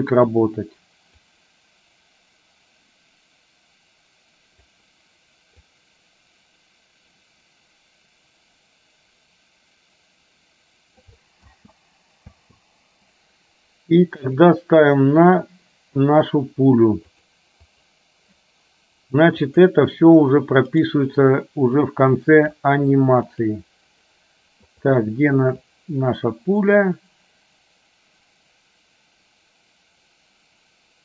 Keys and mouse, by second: 1.3-4.8 drag, 5.7-11.2 drag, 11.7 space, 14.5-17.3 drag, 18.0 click, 19.6 click, 22.7 click, 23.5 click, 25.1 click, 26.0-31.0 drag.